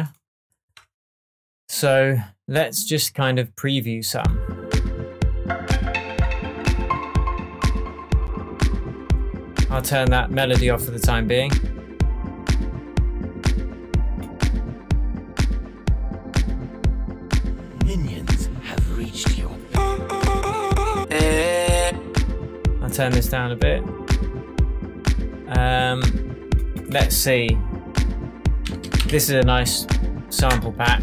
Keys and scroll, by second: 28.4-29.6 typing, 30.4 Return.